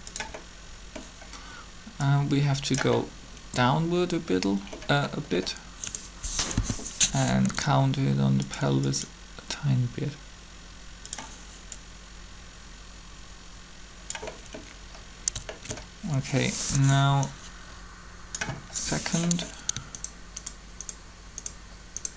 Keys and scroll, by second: 6.5 1, 7.3 r.